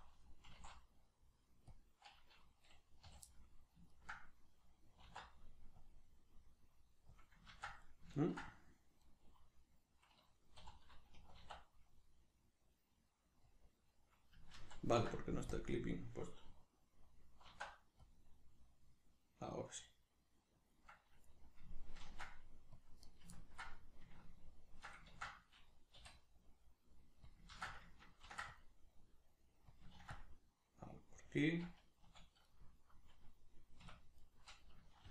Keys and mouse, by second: 0.4 s, 1.8 click, 3.0 a, 3.3-7.2 middle drag, 5.0 alt+e, 7.2 click, 7.5 ctrl+z, 7.8-13.6 middle drag, 10.6 3, 11.4 alt+e, 13.6 click, 14.6 ctrl+z, 15.5-17.5 drag, 17.5 alt+e, 20.7 click, 20.9-23.2 middle drag, 22.0 ctrl+r, 23.2 right click, 23.4-27.4 ctrl+middle drag, 25.1 ctrl+z, 27.4 click, 27.5 ctrl+z, 28.2 ctrl+r, 29.8 click, 30.0 ctrl+r, 31.4 click, 32.0 \, 32.4-35.1 middle drag, 33.8 \, 35.0 ctrl+r.